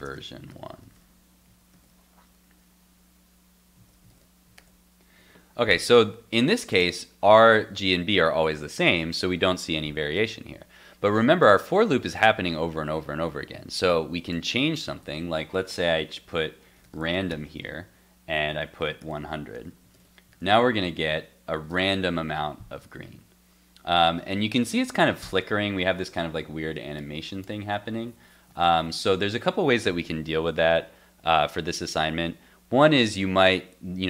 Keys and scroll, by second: 0.8 super+s, 1.7 super+s, 3.8 super+s, 4.1 super+Tab, 4.5 super+r, 19.5 super+s, 19.9 super+Tab, 20.3 super+r, 28.5 super+r.